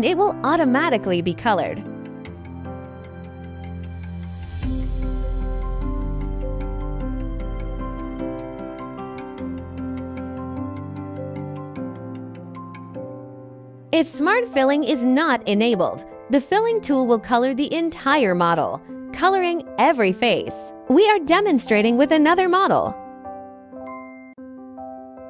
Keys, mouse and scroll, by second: 0.0 right click, 0.6 click, 3.3 right click, 3.6 click, 4.0 scroll, 4.3 click, 4.5 click, 4.7 click, 5.1 scroll, 5.2 click, 5.6 click, 6.8 click, 7.0 click, 7.3 click, 8.8 click, 10.6 click, 12.0 right click, 21.7 click, 22.4 click, 23.7 click.